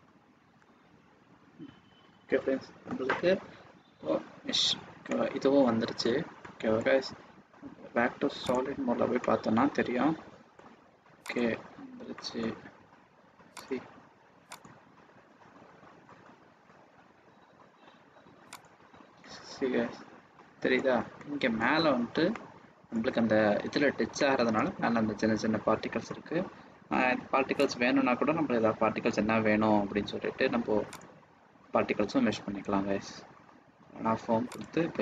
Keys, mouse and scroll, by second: 5.0 middle click, 8.5 click, 9.1 middle click, 11.3 click, 12.1 middle click, 13.5 click, 14.5 click, 19.0 click, 19.3 middle click, 21.1 middle click, 22.3 middle click, 26.6-26.9 scroll down 3, 27.6 click, 28.1 scroll down 2, 31.3 click, 31.4-31.9 scroll down 1, 32.1-33.6 scroll down 10, 33.4 scroll up 1, 34.5 click.